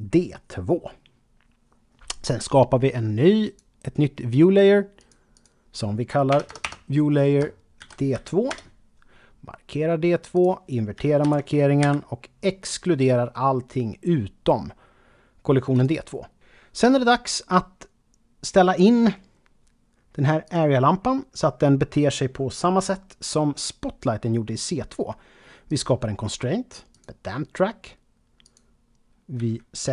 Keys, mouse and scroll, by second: 0.0 click, 3.4 click, 5.0 click, 6.3 BackSpace, 6.5 BackSpace, 7.8 shift+d, 8.5 Return, 10.3 click, 11.8 e, 15.7 click, 20.4 click, 25.7 click, 26.9 click, 28.4 click, 29.4-29.9 typing.